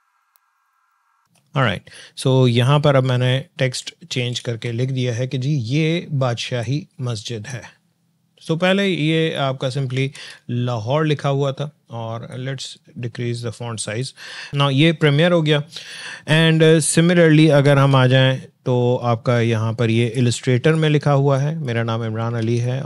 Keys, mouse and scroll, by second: 0.0-1.5 typing, 3.8 ctrl+d, 6.6-7.5 drag, 10.1 ctrl+z, 12.4-14.1 drag, 16.7 click, 16.7 alt+Tab, 19.9-21.6 drag, 22.4 alt+Tab.